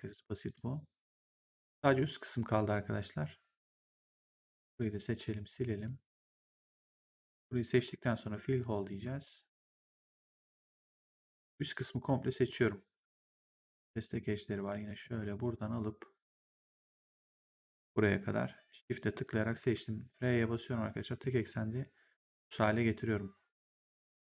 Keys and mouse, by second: 0.4 click, 4.2 click, 5.6 click, 6.4 right click, 6.9 click, 8.8 click, 10.0 click, 10.8 right click, 12.4 click, 15.0 click, 18.6 shift+click, 19.5 r, 21.1 click.